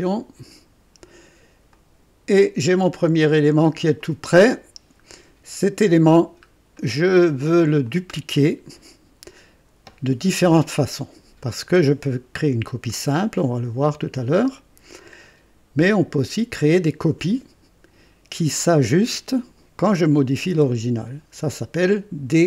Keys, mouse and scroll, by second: 1.7-3.0 drag, 1.7 typing, 3.9 click, 5.4 scroll up 1, 6.0 scroll down 1, 6.8 right click, 7.8-9.7 drag.